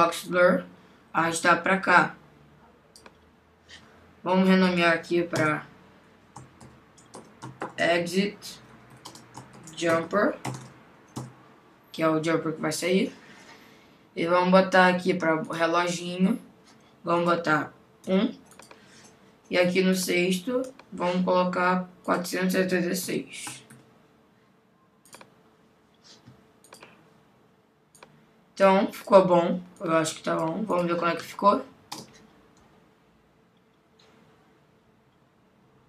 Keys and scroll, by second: 5.4 Return, 9.5 shift+j, 11.2 Return.